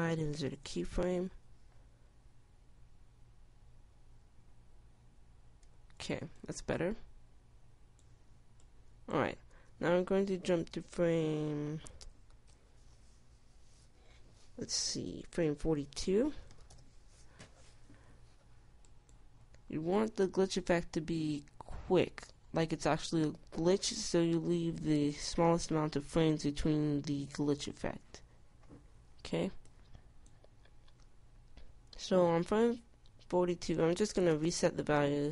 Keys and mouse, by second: 1.1 i, 2.2 Tab, 7.1 Tab, 10.9 Tab.